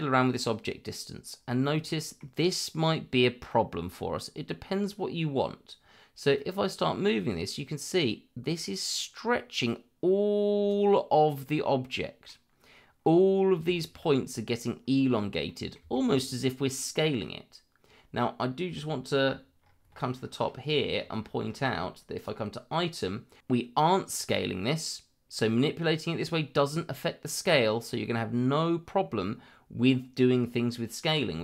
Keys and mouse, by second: 1.7 middle click, 3.5 middle click, 6.3-10.7 drag, 11.5 middle click, 13.7 shift+middle click, 15.4 middle click, 15.9 shift+middle click, 22.1 click.